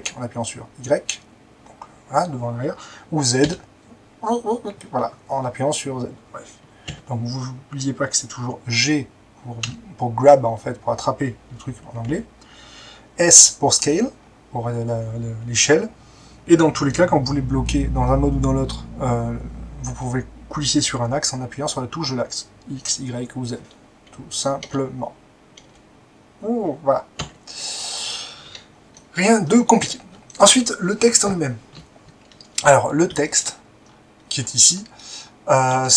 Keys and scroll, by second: 3.4 z, 6.9 Escape, 9.6 g, 12.0 Escape, 13.3 s, 24.7 alt+x, 25.6 x, 27.1 Escape.